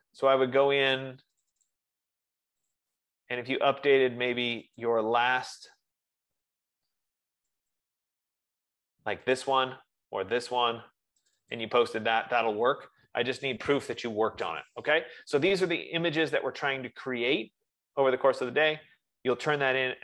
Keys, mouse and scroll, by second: 1.8 click, 2.2 click, 3.3 click, 5.1 click, 5.5 click, 7.9 click, 9.7 click, 10.7 click, 11.5 click, 11.9 click.